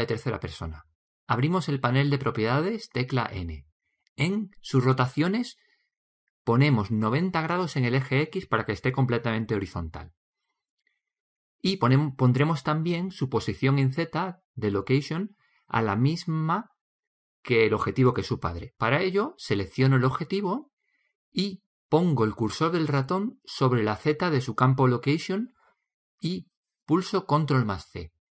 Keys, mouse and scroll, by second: 0.2 middle click, 0.7-2.5 right drag, 3.6 n, 5.3-7.2 drag, 8.7-10.5 drag, 12.1-14.1 middle drag, 21.9-23.8 drag, 26.8 ctrl+c.